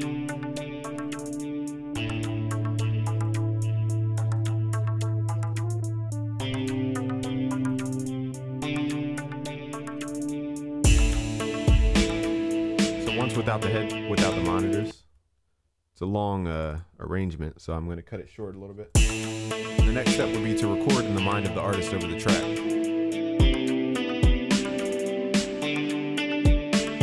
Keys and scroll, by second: 23.5 ctrl+s.